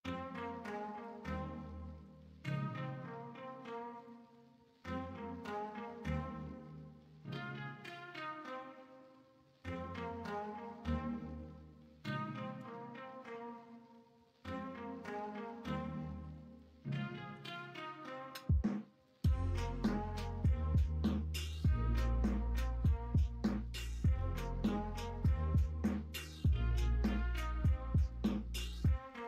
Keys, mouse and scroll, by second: 5.5 x, 11.3 1, 12.5 g, 16.2 3, 17.3 2, 19.6 x, 21.4 x, 22.9 1, 26.6 3, 28.2 2.